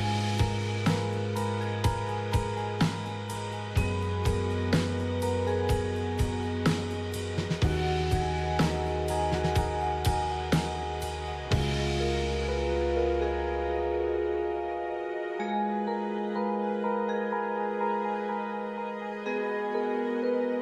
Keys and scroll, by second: 0.0-3.5 typing, 6.0 typing, 8.0-10.2 typing, 10.4 Return.